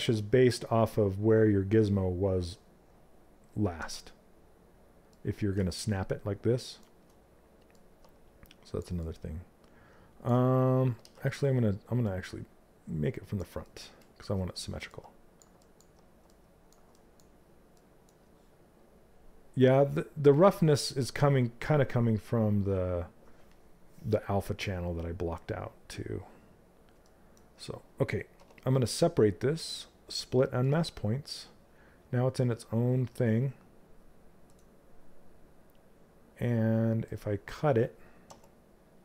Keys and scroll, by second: 10.5 ctrl+z, 27.8 2, 37.8 w.